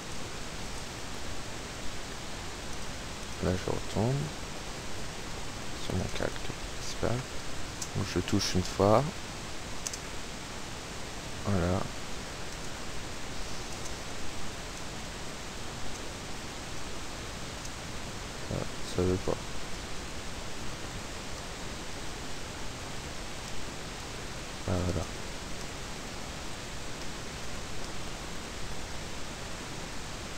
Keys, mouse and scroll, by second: 0.1 click, 0.8 click, 2.9 click, 3.3 click, 5.9 click, 6.4 p, 6.9 space, 9.7 space, 11.5 Up, 11.9 Right, 12.3 Up, 12.6 space, 13.8 space, 14.2 Left, 14.7 space, 15.3 Left, 15.8 space, 16.8 space, 17.1 Left, 18.3 space, 18.4 Up, 19.1 Right, 19.6 space, 20.3 Up, 20.7 space, 21.1 Right, 21.5 space, 21.7 Right, 21.7 Up, 23.5 space, 24.8 Left, 25.0 space, 25.4 Left, 25.8 space, 26.4 Left, 26.5 Up, 26.7 Right, 26.9 Up, 27.1 space, 28.0 Right, 29.5 Up, 29.9 space.